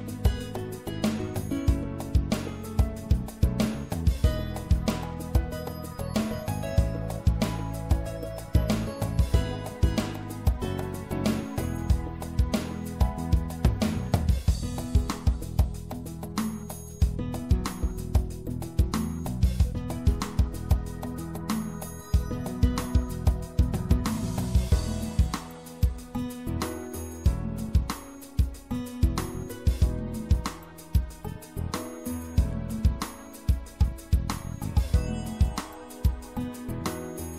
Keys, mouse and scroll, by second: 0.6 click, 0.9 middle click, 1.5-3.3 middle drag, 7.8 f, 10.9-14.3 middle drag, 16.2 right click, 18.1 shift+f, 18.9 middle click, 20.3 right click, 20.4 middle click, 21.5 right click, 21.7-22.8 right drag, 22.8 click, 26.4-30.1 middle drag, 33.2 i.